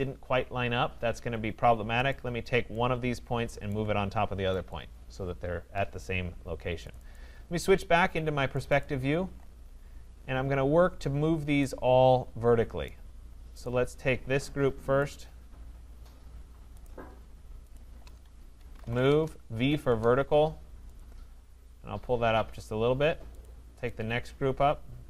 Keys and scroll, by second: 19.0 Return.